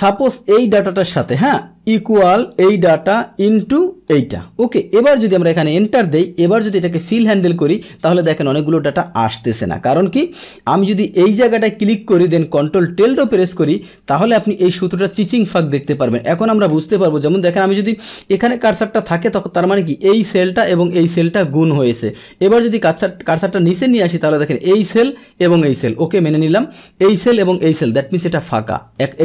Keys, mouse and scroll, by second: 2.4 click, 3.0 shift+click, 4.0 click, 5.0 Return, 6.0 click, 6.7 click, 11.2 click, 14.5-15.3 drag, 22.5 Down, 26.5 Down, 28.6 Down, 29.0 Down.